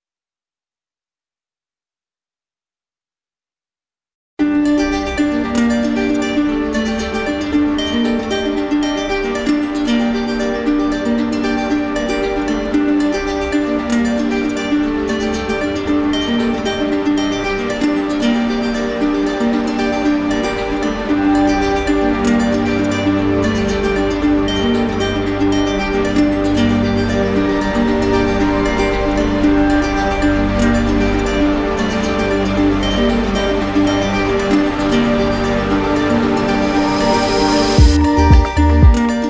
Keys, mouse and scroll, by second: 0.7 click, 1.2 click, 1.8 click, 3.3 click, 4.6 click, 5.5 click, 5.9 shift+click, 6.5 shift+click, 6.7 click, 7.4 click, 8.0 w, 10.1 click, 10.9 click, 12.7 click, 13.0 shift+click, 13.6 shift+click, 15.1 shift+click, 16.1 alt+click, 24.4 click, 26.3 click, 28.5 click, 32.0 click, 36.1 click, 36.9 click, 37.4 click, 37.9 shift+click, 38.5 shift+click.